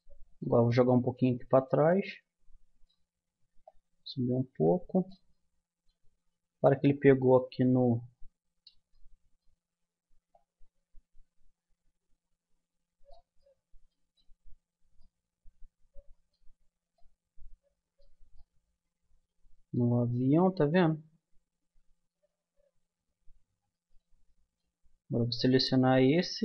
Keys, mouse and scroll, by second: 2.1 click, 3.6-5.3 drag, 5.3-8.4 middle drag, 8.4 click, 8.9-10.9 middle drag, 10.3-12.1 drag, 12.1-14.6 middle drag, 16.4 Tab, 20.1-23.7 middle drag, 20.6 Tab, 21.6 Tab, 23.7 click, 25.2-26.4 middle drag.